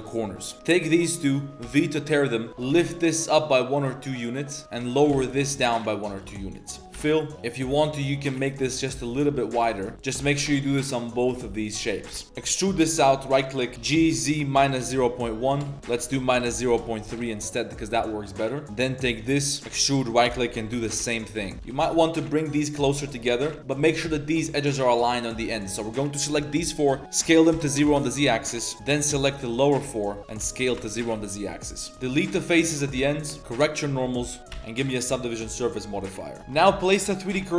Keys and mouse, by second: 0.4 click, 0.4 a, 0.5 2, 0.8 shift+click, 1.6 v, 2.4 click, 2.5 ctrl+z, 2.5 g, 2.5 g, 4.6 shift+click, 4.6 shift+2, 4.9 g, 6.4 click, 6.9 f, 7.0 click, 7.3 3, 7.3 s, 9.6 click, 9.9 ctrl+z, 9.9 click, 9.9 s, 10.1 s, 11.7 click, 12.1 click, 12.3 e, 14.4 g, 15.7 ctrl+z, 15.8 g, 17.0 z, 17.5 click, 18.1 click, 18.5 click, 18.9 3, 19.6 e, 20.3 g, 21.5 3, 21.5 1, 21.6 g, 23.2 click, 23.6 ctrl+z, 25.1 click, 27.2 s, 28.5 z, 28.7 middle click, 28.8 click, 29.4 shift+click, 29.9 shift+click, 31.0-34.3 typing, 31.5 middle click, 32.2 shift+click, 32.7 shift+click, 33.4 ctrl+s, 33.4 Tab, 33.4 ctrl+z, 34.4 Tab, 34.5 ctrl+2, 35.1 ctrl+3, 35.3-35.8 drag, 36.0-36.4 drag, 36.4 KP_7, 36.4 1, 36.8 alt+click, 37.3 shift+s.